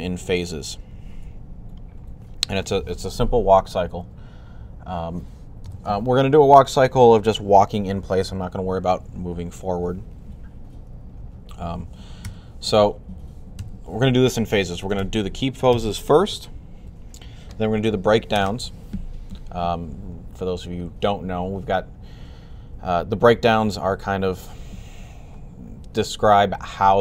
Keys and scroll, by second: 12.0 3, 13.1-13.9 typing.